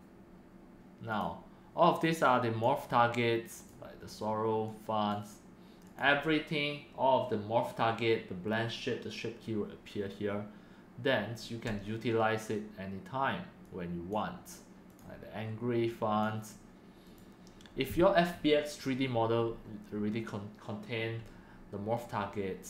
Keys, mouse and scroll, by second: 0.2-1.7 right drag, 1.7-5.4 drag, 5.9 click, 8.9-9.5 drag, 14.0-14.8 drag, 14.9-16.8 drag.